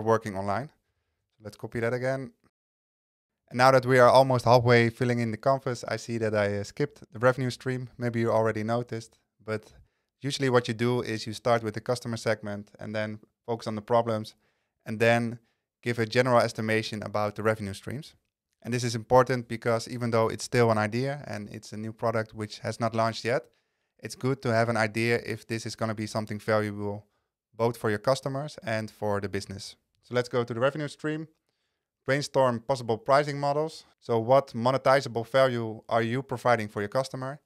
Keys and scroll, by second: 1.1 super+c.